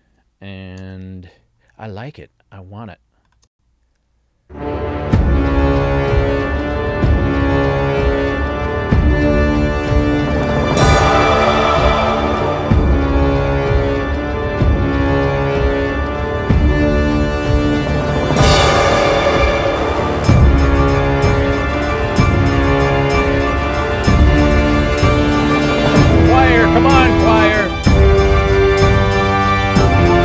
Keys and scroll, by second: 3.5 space.